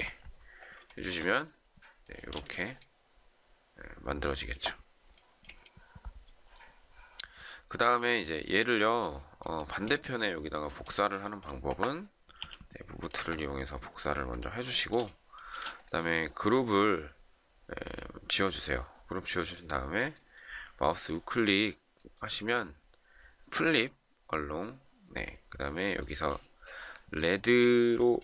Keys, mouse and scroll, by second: 0.8 shift+middle click, 2.1 space, 5.1 shift+middle click, 9.5 shift+middle click, 11.2 shift+middle click, 12.3 m, 14.6 shift+middle click, 15.4 space.